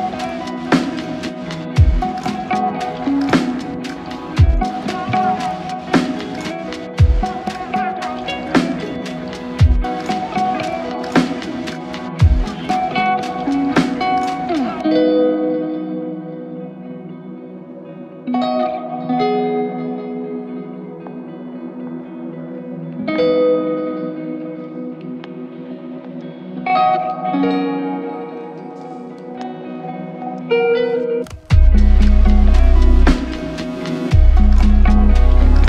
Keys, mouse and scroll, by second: 4.5 alt+click, 13.4 q, 19.3 typing, 21.3 shift+r.